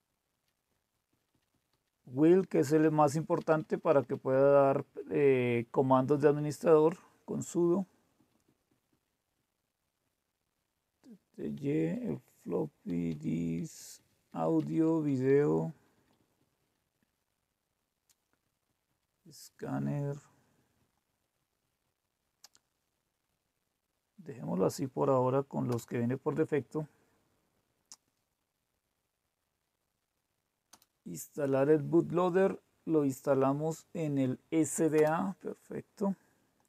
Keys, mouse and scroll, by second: 1.1 Down, 1.3 Down, 1.5 Down, 1.6 Down, 3.7 Up, 3.9 Up, 8.2 Down, 8.4 Down, 8.6 Down, 8.8 Down, 9.3-9.9 Down, 10.5 Down, 10.9 Down, 11.1 Down, 11.8 Up, 12.8 Down, 13.1 Down, 13.3 Down, 13.5 Down, 13.7 Down, 13.9 Down, 14.2 Down, 14.5 Down, 14.8 Down, 15.0 Down, 15.5 Down, 15.7 Down, 15.9 Down, 16.1 Down, 16.3 Down, 16.7 Down, 16.9 Down, 18.4 Down, 18.6 Down, 18.8 Down, 19.2 Down, 19.4 Down, 19.6 Down, 19.8 Down, 20.1 Down, 20.5 Down, 20.9 Down, 21.3 Down, 21.7 Down, 22.0 Down, 25.7 Return, 30.7 Return, 35.0 Return.